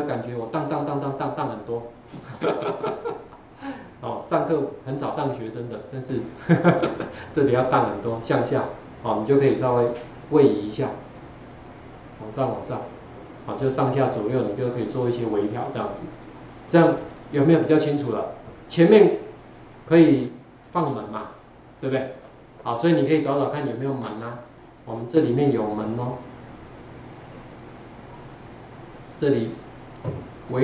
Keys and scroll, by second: 0.1 Down, 4.1 Down, 4.3 Down, 5.9 Down, 6.1 Down, 6.3 Down, 6.5 Down, 6.7 Down, 9.3 Up, 9.5 Up, 9.7 Up, 10.0 Up, 10.2 Up, 10.3 Up, 11.1-11.5 Up.